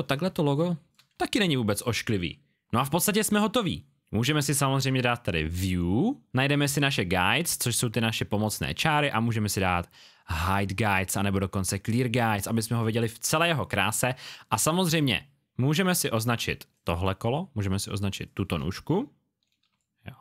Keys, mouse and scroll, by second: 0.2 space, 0.3 click.